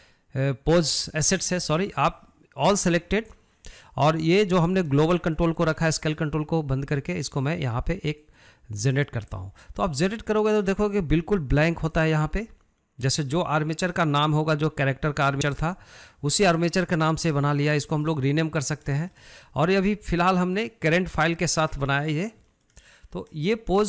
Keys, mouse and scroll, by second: 8.5-11.5 drag, 15.7-19.1 shift+middle drag, 19.1 scroll down 2, 19.4-23.8 shift+middle drag.